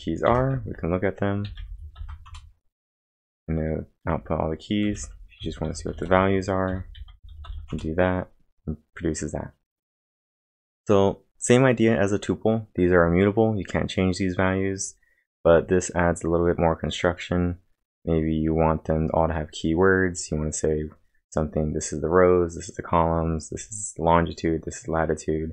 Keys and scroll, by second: 0.3-2.0 typing, 2.3 Return, 4.6-7.9 typing.